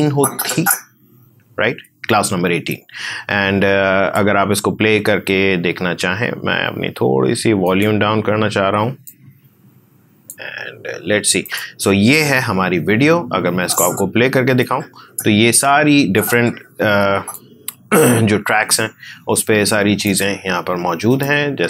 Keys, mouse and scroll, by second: 7.6-11.4 drag, 12.8 space, 13.6-21.6 drag.